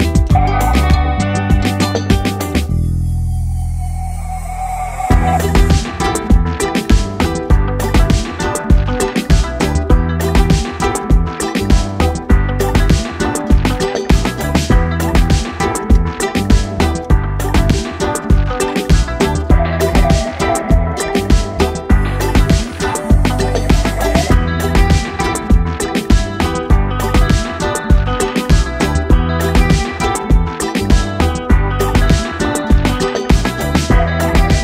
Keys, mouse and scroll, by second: 5.7 space, 5.8 click, 6.1 space, 7.3 click, 12.8 ctrl+d, 13.3 ctrl+space, 13.5 ctrl+click, 13.7 ctrl+space, 14.3 click, 16.3 click, 16.4 ctrl+space, 16.7 ctrl+click, 16.8 ctrl+space, 17.8 click, 22.8 click, 27.6-29.0 drag, 29.0-29.6 typing, 30.9 click, 31.3 Up, 32.4 click, 32.7 Down.